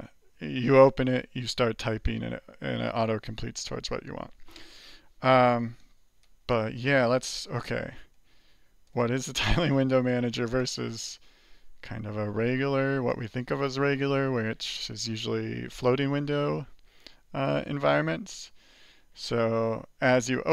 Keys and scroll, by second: 13.8 alt+q, 13.8 alt+Return, 13.8 alt+q, 15.8 alt+Return, 18.2 alt+q.